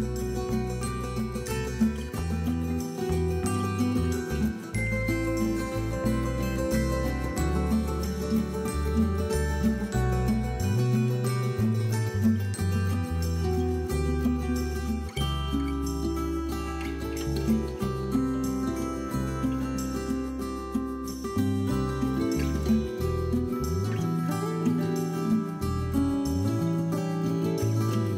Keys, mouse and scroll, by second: 0.1 i, 0.9-1.7 shift+drag, 1.7 g, 2.5 drag, 2.6 scroll down 1, 2.7 middle click, 3.0-3.4 scroll up 2, 3.1 middle click, 3.4 scroll down 1, 3.5 middle click, 4.2-4.8 scroll up 1, 4.8 scroll down 1, 5.0 middle click, 5.2-5.7 scroll up 1, 6.4 ctrl+r, 6.9 click, 7.0 middle click, 7.7 shift+click, 8.3 g, 8.9 click, 10.0-12.5 middle drag, 10.2 scroll up 2, 10.4 scroll down 2, 10.9 scroll up 2, 11.0-11.5 scroll down 4, 11.7-12.5 scroll up 4, 12.5 click, 12.8 shift+click, 13.0 scroll down 2, 13.1 middle click, 13.5 e, 13.9 middle click, 14.1 click, 14.2 middle click, 14.5 scroll up 2, 15.0-15.5 drag, 15.5 middle click, 16.1 x, 17.0 middle click, 17.2 scroll up 1, 17.5 shift+middle drag, 17.7-18.9 drag, 18.9 x, 19.4 middle drag, 19.8 click, 20.1 x, 20.5-20.8 middle drag, 20.8-21.2 scroll down 4, 20.9 middle click, 21.1 click, 21.2 middle click, 21.8-22.4 scroll up 4, 21.9 middle click, 22.4 middle click, 22.7 shift+click, 23.5 scroll down 2, 23.6-24.2 middle drag, 24.3 g, 25.1 click, 25.2 middle click, 25.6 click, 25.7 scroll down 1, 25.8 middle click, 25.9 scroll up 1, 26.1 scroll down 1, 26.5 scroll up 1, 26.6 middle click, 27.2 ctrl+r.